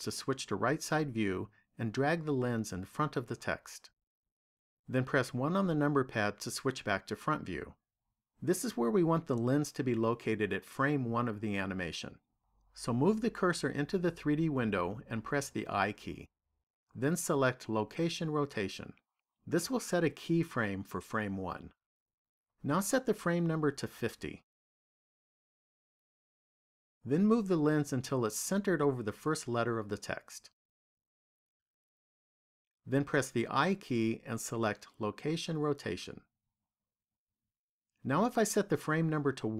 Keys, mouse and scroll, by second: 0.6 click, 5.2 KP_1, 15.5 i, 23.4 click, 29.5 click, 33.8 i.